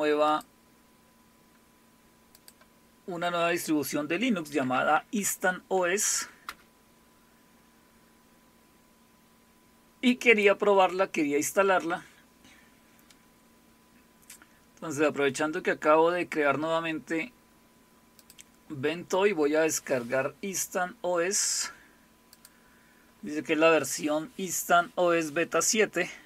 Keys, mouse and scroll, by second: 0.3 click, 2.3 click, 4.4-5.4 typing, 6.1 Right, 6.4 Return, 10.3 click, 11.0 click, 14.6-16.5 scroll down 8, 18.2 click, 22.3 click.